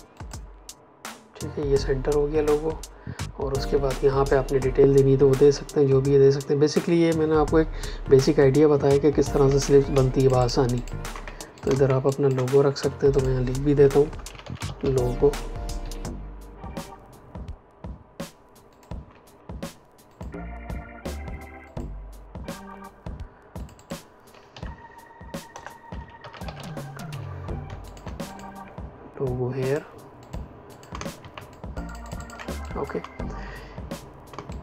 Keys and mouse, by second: 9.4 space, 10.1 ctrl+alt+click, 11.2 click, 11.6 space, 12.0 ctrl+click, 12.7 t, 13.0 click, 14.0-15.0 typing, 15.7 Escape, 18.6 click, 24.4 End, 25.4 Return, 25.9-27.0 typing, 27.0 Escape, 27.8 shift+click, 30.8 space, 31.4 ctrl+alt+click, 32.6 click, 34.2 space, 34.4 click.